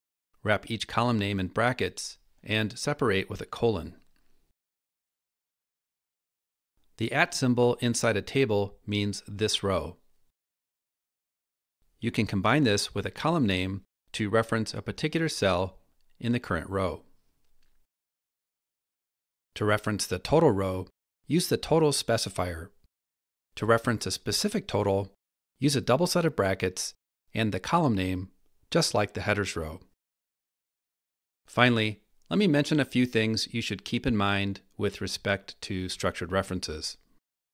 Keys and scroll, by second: 0.0 Delete, 0.0 BackSpace, 4.3 Escape, 7.2 Delete, 7.2 BackSpace, 10.0 Escape, 11.8 Left, 12.9 Delete, 12.9 BackSpace, 17.8 Escape, 20.3 Delete, 20.3 BackSpace, 23.0 Escape, 24.6 Delete, 24.6 BackSpace, 29.3 Escape.